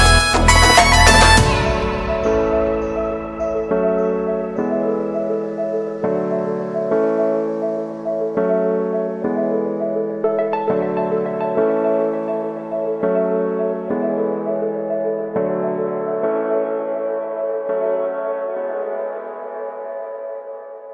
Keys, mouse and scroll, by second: 2.6-4.7 drag, 4.8-5.6 scroll down 3, 5.6-8.0 shift+middle drag, 8.0-8.9 scroll up 1, 8.9 shift+middle click, 9.4 scroll up 5, 10.2 click, 11.9 Tab, 12.3 click, 13.3-15.2 drag, 16.3 click, 18.9-19.9 shift+middle drag, 19.9-20.5 scroll down 6, 20.7-20.9 drag.